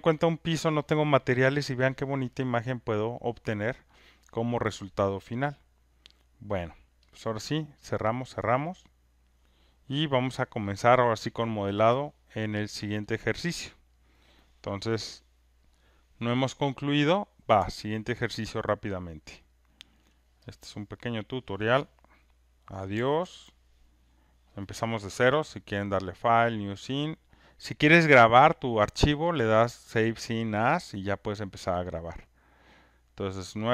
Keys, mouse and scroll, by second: 7.2 click, 7.9 click, 18.5 alt+right click, 19.5 alt+click, 20.0 alt+right click, 21.1 click, 22.9 Delete, 25.8 click, 26.5-31.0 drag.